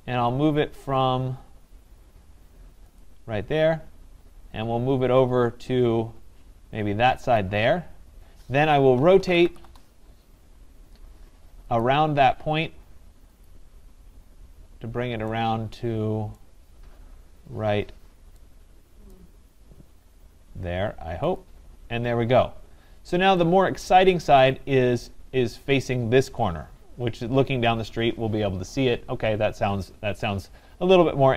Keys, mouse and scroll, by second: 0.3 scroll, 1.0-1.5 scroll, 3.0 click, 3.3-4.1 scroll up 13, 4.4 scroll, 5.2 scroll, 6.5 scroll, 7.4 click, 8.8-10.1 typing, 11.6 typing, 11.8 click, 13.5 click, 14.3-15.2 typing, 16.3 right click, 19.1 right click, 20.0 scroll, 21.4 click, 22.1 scroll, 22.9 scroll, 24.4 right click, 24.7-25.3 scroll.